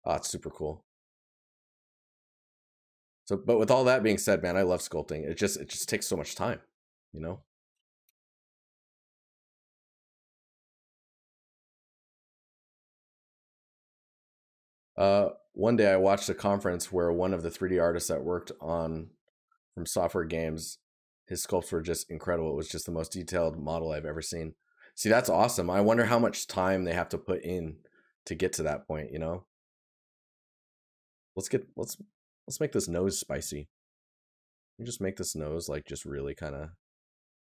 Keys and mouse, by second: 5.9 right click, 11.7 right click, 26.2 right click, 29.5 right click, 34.2 right click.